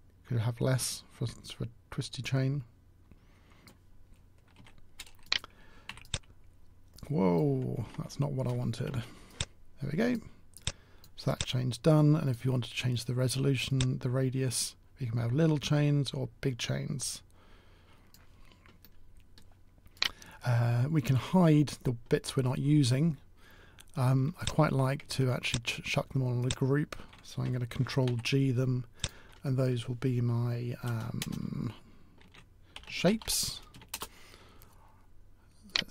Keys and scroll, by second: 4.4 w, 5.7 t, 7.8 ctrl+z, 27.9 ctrl+g.